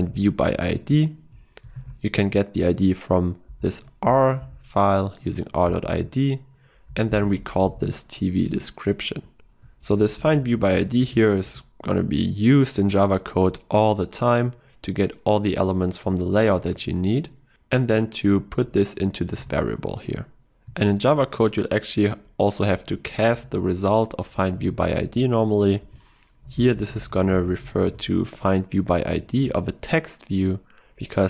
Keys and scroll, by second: 8.5 Return, 10.6 ctrl+w, 19.4 ctrl+w, 23.4 ctrl+w.